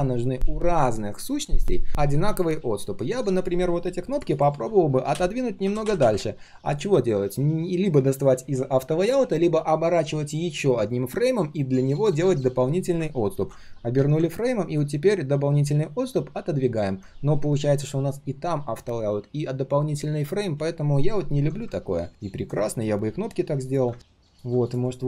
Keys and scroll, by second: 13.3 ctrl+alt+g.